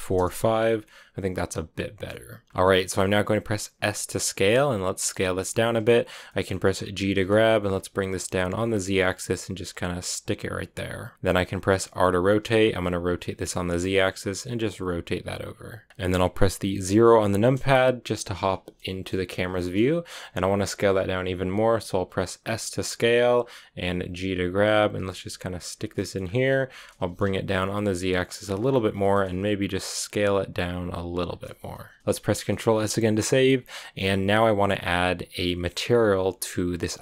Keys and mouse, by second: 0.8-2.3 middle drag, 2.6 middle click, 3.4 s, 4.8 click, 5.0 middle click, 6.1 middle click, 6.9 g, 7.5 z, 11.4 click, 11.9 r, 12.8 z, 15.7 click, 17.3 KP_0, 18.9 shift+middle click, 21.4 s, 23.1 click, 23.7 g, 25.5 shift+click, 25.8 shift+click, 26.5 g, 26.9 z, 28.3 shift+middle click, 28.9 s, 31.0 shift+click, 31.4 a, 31.8 click, 32.5 ctrl+s.